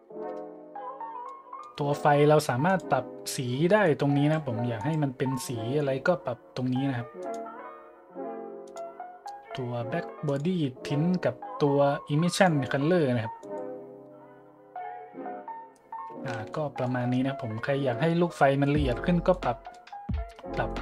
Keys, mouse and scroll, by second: 0.2-0.5 scroll down 4, 1.2 middle click, 1.8 middle click, 2.0 middle click, 2.7 click, 3.8 click, 4.7 click, 7.2 click, 8.6 click, 10.2 click, 12.4-12.7 drag, 13.4 click, 16.5-16.8 shift+middle drag, 16.9-17.2 shift+drag, 19.9 middle click, 20.1 middle click, 20.4 middle click.